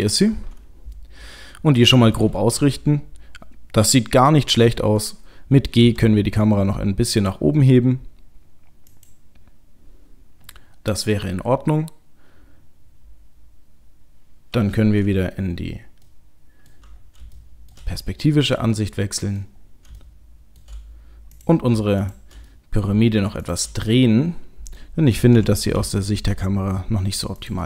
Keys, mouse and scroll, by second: 0.2 middle click, 2.6 KP_0, 16.1 middle click, 17.0-17.4 scroll down 4, 17.4 shift+middle click, 17.9-18.3 scroll up 6, 18.8 middle click, 19.6-20.0 scroll down 3, 20.0 shift+middle click, 21.3 click, 22.0 shift+click, 22.5 middle click, 23.3 shift+click, 23.9 middle click, 25.4 r.